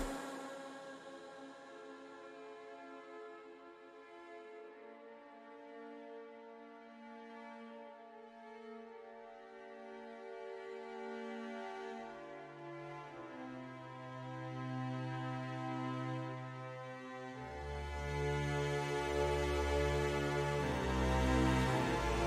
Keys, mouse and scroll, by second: 0.4 middle click, 2.5 ctrl+click, 4.4 shift+click, 5.2 middle click, 7.8 middle click, 9.3 shift+click, 9.9 middle click, 11.1 middle click, 15.6 shift+click, 16.9 shift+click, 17.4 middle click, 19.2 shift+click, 19.7 middle click, 21.0 shift+click.